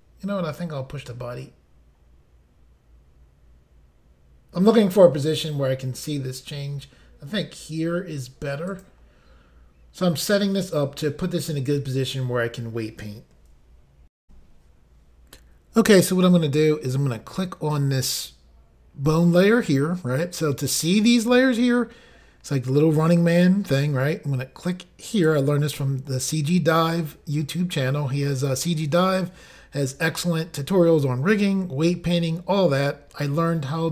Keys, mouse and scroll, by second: 8.7 click, 8.8 click, 14.2 Insert, 25.1 click.